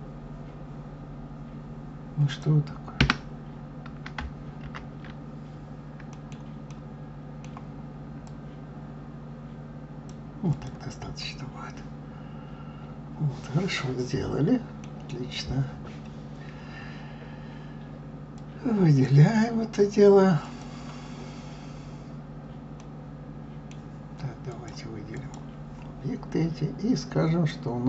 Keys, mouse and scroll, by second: 3.0 Escape, 4.6 ctrl+z, 6.1-8.2 middle drag, 8.2 click, 10.5 click, 11.2-14.2 middle drag, 15.0-15.9 scroll down 1, 15.9-17.9 scroll up 2, 18.4 click, 20.4 click, 21.7-22.8 scroll down 1, 22.8-24.5 middle drag, 24.5-27.5 drag.